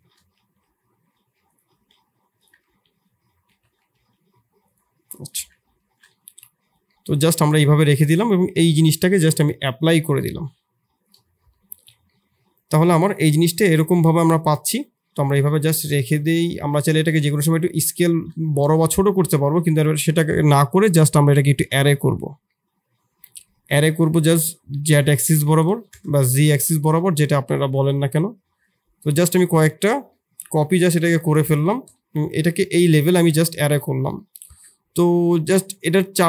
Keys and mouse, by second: 0.3 s, 1.7 s, 2.6 g, 3.9 s, 5.3 Tab, 5.8 shift+z, 6.0-6.4 middle drag, 6.8 middle drag, 11.0 click, 11.4 Delete, 12.0 middle drag, 13.0-13.8 middle drag, 15.3 Tab, 16.0 KP_1, 16.3 shift+z, 16.8 shift+click, 17.2 Tab, 17.8 shift+z, 18.4 middle click, 20.7-22.4 drag, 22.4 middle click, 24.1-26.7 drag, 25.3 Tab, 26.7 middle drag, 30.0 middle click, 30.8 g, 32.1 KP_3, 33.0 shift+click, 33.3-33.7 drag, 34.2 click, 34.4 Tab, 35.3 3.